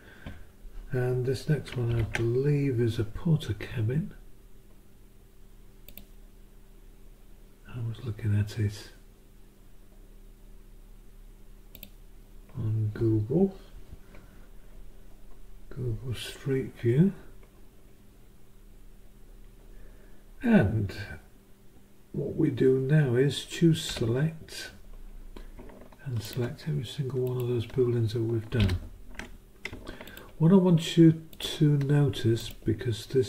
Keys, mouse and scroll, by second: 1.9 ctrl+Down, 5.9 click, 11.7 click, 23.6 click, 23.9 s, 26.2 click, 27.2 ctrl+click, 28.6 ctrl+Up, 30.1 ctrl+click, 31.3 click, 32.4 click.